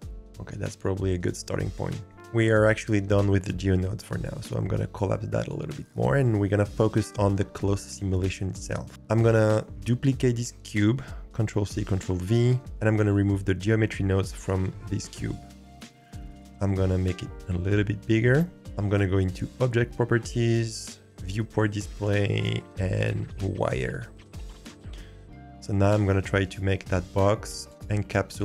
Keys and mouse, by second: 4.4-5.8 drag, 6.3-7.4 drag, 11.5 ctrl+c, 11.9 ctrl+v, 15.2 click, 16.3 click, 17.3 s, 19.5 click, 21.1 click, 22.4-23.6 drag, 24.5-25.2 drag, 26.6-27.1 shift+drag, 27.1 g, 27.7 s, 27.9 g.